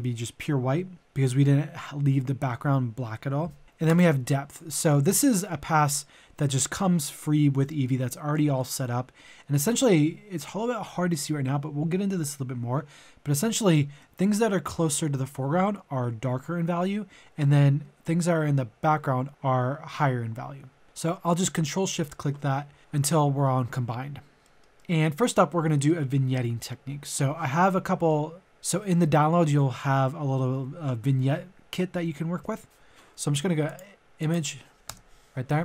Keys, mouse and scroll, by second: 3.8 ctrl+shift+click, 4.7-6.3 middle drag, 20.8 ctrl+click, 24.4-26.1 middle drag, 33.6 click, 34.7 typing, 34.9 Return.